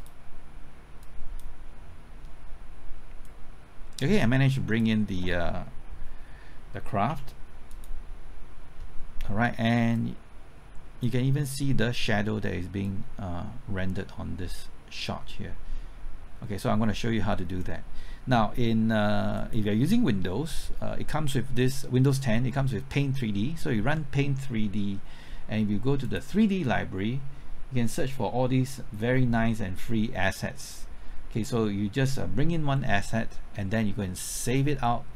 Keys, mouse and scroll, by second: 7.1 z, 7.7-35.1 drag.